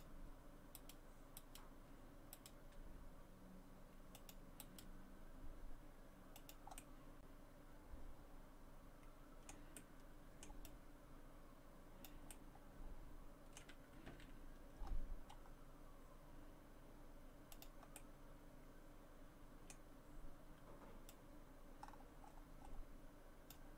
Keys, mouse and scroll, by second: 0.8 right click, 1.4 right click, 2.4 right click, 2.8 g, 4.6 right click, 4.8 g, 6.8 middle click, 9.8 middle click, 10.6 click, 12.3 middle click, 14.1 r, 18.0 middle click, 21.1 click.